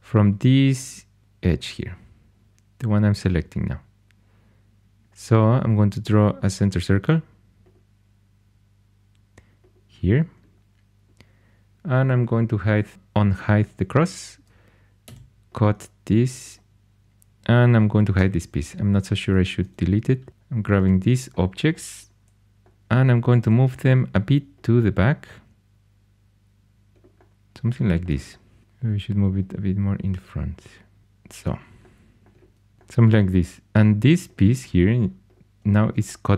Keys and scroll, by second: 1.2 2, 15.0 c, 18.1 h, 20.3 4, 23.3 g.